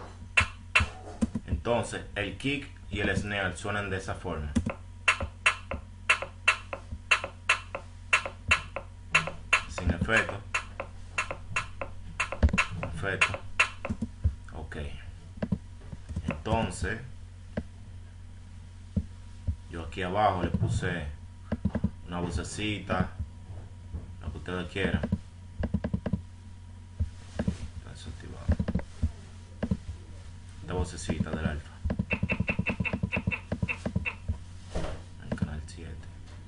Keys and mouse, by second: 0.8-4.5 drag, 5.3-6.0 drag, 8.9 right drag, 13.3 right click, 14.5 right click, 15.1 F5, 20.1 click, 22.7 F6, 23.1 F1, 27.0 F1, 27.6-29.1 drag, 31.4-34.3 drag, 34.4-35.0 drag.